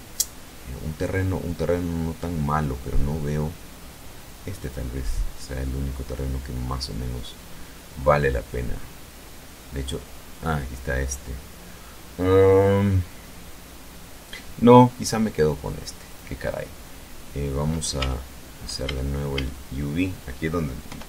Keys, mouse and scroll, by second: 1.2-1.7 scroll up 1, 3.6 click, 4.2-5.4 scroll up 1, 5.6-6.2 scroll up 1, 6.2 scroll up 1, 7.1-8.2 scroll down 4, 8.7-9.1 scroll down 1, 15.0 click, 16.9 Tab, 17.8 a, 19.8 u, 20.6 click.